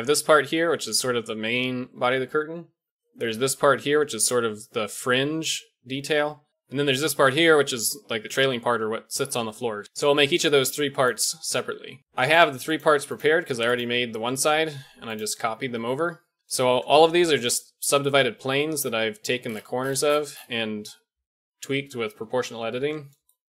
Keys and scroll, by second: 0.9 d, 2.8-4.3 d, 6.5 ctrl+z, 6.5-8.1 typing, 16.4 Tab, 16.4 o, 16.4 g, 17.3 Tab, 19.1 g, 22.7 Tab.